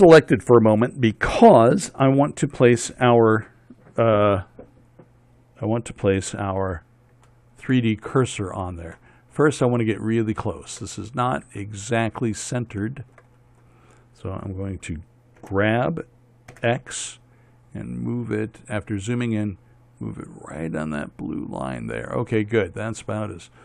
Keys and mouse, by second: 9.9-13.6 middle drag, 16.0 g, 22.8 middle click.